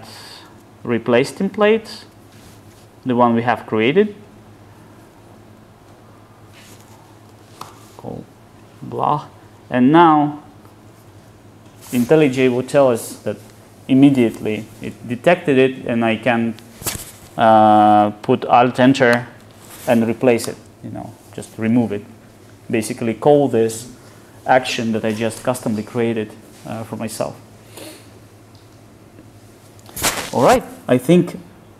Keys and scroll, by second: 19.2 alt+Return.